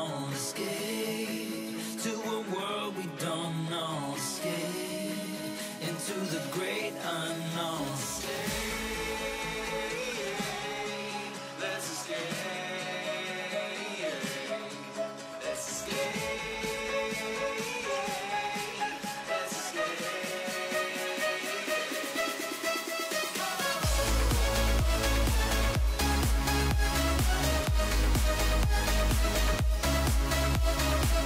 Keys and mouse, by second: 1.0-2.3 drag, 3.4-6.4 drag, 7.7-8.5 drag, 9.8 click, 10.7-12.1 drag, 13.0-15.6 drag, 17.2-18.1 drag, 20.6-22.2 drag, 23.2-25.8 drag, 27.1-27.9 drag, 29.9-31.2 drag.